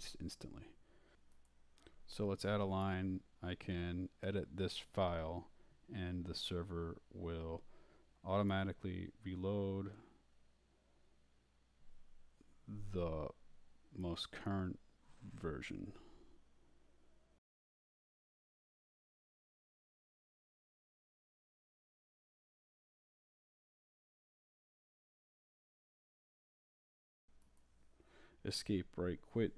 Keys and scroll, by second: 0.0-0.1 typing, 1.8-12.6 typing, 17.9-23.0 typing, 23.8 shift+Left, 24.4-26.9 typing, 25.7 Escape.